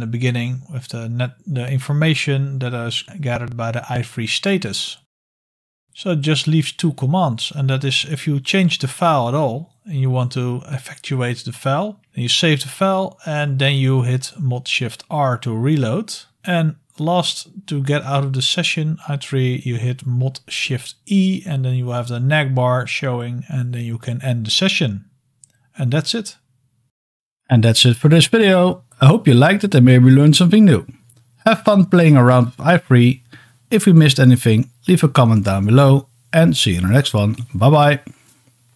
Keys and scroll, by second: 3.6 typing, 5.8 ctrl+l, 5.8 typing, 14.3 super+r.